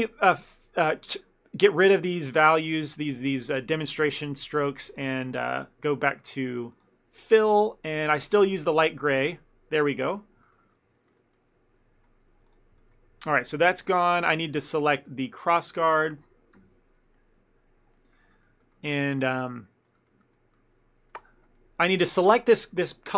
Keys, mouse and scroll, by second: 0.1 shift+middle click, 0.2 middle click, 0.5 shift+middle click, 0.9 ctrl+middle click, 2.3 shift+middle click, 5.0 click, 9.8 middle click, 11.4 middle click, 12.5 click, 12.9 shift+middle click, 13.5 ctrl+middle click, 14.4 shift+middle click, 14.7 ctrl+middle click, 15.2 a, 15.3 a, 16.7 l, 18.0 ctrl+middle click, 18.4 shift+middle click, 18.7 ctrl+middle click, 18.9 shift+middle click, 19.2 ctrl+middle click, 19.6 middle click, 20.1 shift+middle click, 20.3 ctrl+middle click, 20.6 middle click.